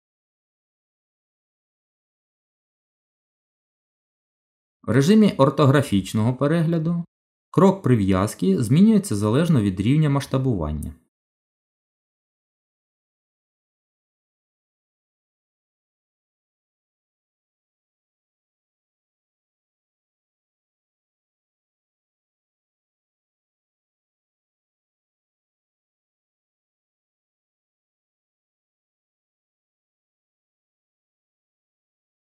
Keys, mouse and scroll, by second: 0.5 z, 2.5 middle click, 4.8 KP_7, 6.7 shift+middle click, 8.7-9.5 scroll up 4, 9.7 shift+middle click, 11.1-11.5 scroll down 4, 12.2 scroll down 1, 13.6 z, 16.2-17.0 scroll up 4, 17.9 shift+middle click, 18.6-19.1 scroll up 2, 19.2 shift+middle click, 22.5 click, 25.3-26.1 scroll down 5, 28.9 scroll down 1, 28.9 g.